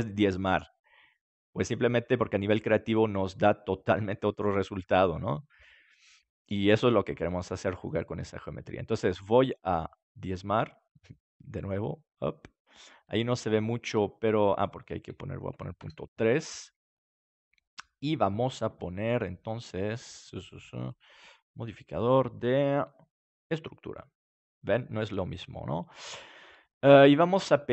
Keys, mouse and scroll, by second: 7.8-9.5 drag, 13.4-14.6 middle drag, 14.6-16.2 drag, 21.8-23.5 drag, 21.8-23.5 right drag, 24.4-26.8 middle drag.